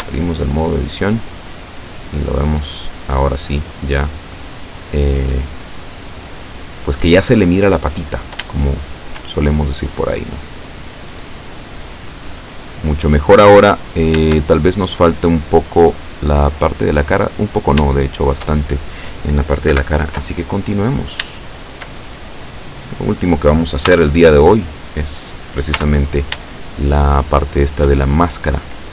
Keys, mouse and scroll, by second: 0.0 Tab, 0.7-2.4 drag, 2.7 click, 3.9-5.2 drag, 5.3-6.5 drag, 6.7-7.7 drag, 8.1-8.5 scroll down 1, 8.7 shift+click, 10.2-11.3 drag, 11.7-12.7 drag, 12.7 click, 13.5-14.1 scroll up 2, 14.4 shift+middle click, 15.3-17.0 middle drag, 17.3-17.7 scroll up 2, 18.0 shift+middle click, 19.8 KP_7, 20.7-21.3 scroll down 1, 21.5 shift+middle click, 22.1 shift+scroll up 1, 23.0 right click, 23.9 Tab, 24.6-25.1 scroll up 1, 25.8 z, 26.6-28.1 shift+middle drag.